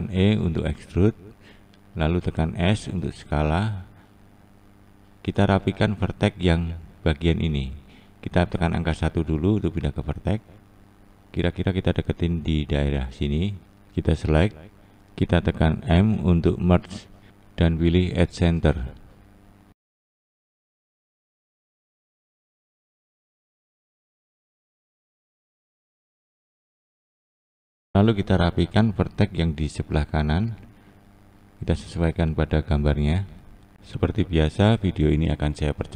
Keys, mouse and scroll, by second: 1.9 s, 7.2 1, 8.0 click, 8.4 click, 13.8 shift+click, 16.1 m, 17.0-17.9 scroll down 1, 17.9-19.2 scroll up 2, 19.2 click, 19.6 click, 21.3 click, 22.0 click, 24.0 click, 24.6 click, 24.9 click, 25.8-26.4 scroll down 1, 26.4-28.2 scroll down 1, 28.2-29.2 scroll up 2, 29.2 click, 29.6 click, 31.5 click, 32.3 click, 32.7 click, 35.0-35.9 scroll down 1.